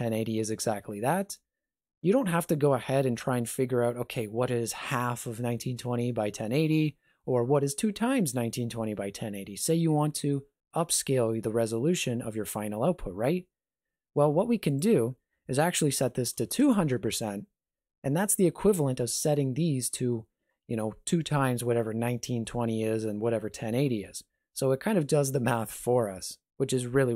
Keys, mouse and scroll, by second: 14.7 click, 16.3 KP_0.